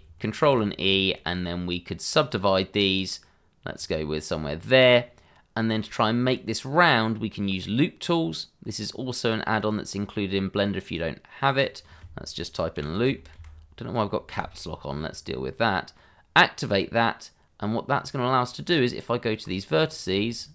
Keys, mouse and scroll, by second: 0.4 ctrl+e, 2.2 click, 6.1 scroll up 1, 8.8 click, 12.7 l, 12.9 o, 13.3 p, 16.6 click, 18.0 middle click, 18.6 Tab, 19.8 click, 20.3 shift+click, 20.4 click.